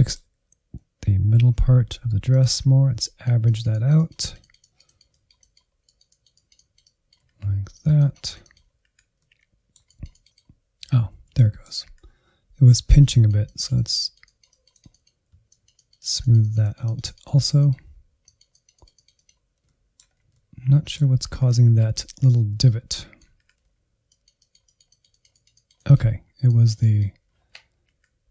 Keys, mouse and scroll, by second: 1.5 Insert, 1.8 click, 2.2 alt+z, 2.4 Insert, 2.8 ctrl+click, 3.0 alt+z, 3.4-5.0 drag, 5.0 Insert, 5.3 click, 5.8 Insert, 6.0 middle click, 6.3 click, 6.6 middle click, 7.2 Insert, 7.5 Insert, 8.2 alt+z, 8.8 ctrl+click, 10.0 ctrl+click, 10.8 alt+z, 10.9 middle click, 11.2 Insert, 11.9-13.7 drag, 13.7 alt+z, 13.9 Insert, 14.6 alt+z, 14.9-17.4 drag, 17.4 middle click, 17.6 Insert, 18.0 click, 18.2 Insert, 18.8 ctrl+click, 19.1 Insert, 19.4-20.0 scroll up 2, 19.6 middle click, 20.0 middle click, 20.4 Insert, 20.6 Insert, 21.2 middle click, 21.5 Insert, 21.7 middle click, 21.9 scroll up 1, 22.1 Insert, 22.5 click, 22.8 scroll down 3, 23.2 Insert, 23.9 ctrl+Left, 24.3 Insert, 24.5 scroll up 2, 24.7-25.8 drag, 25.8 scroll down 2, 26.0 click, 26.5-26.8 scroll down 1, 26.8 Insert.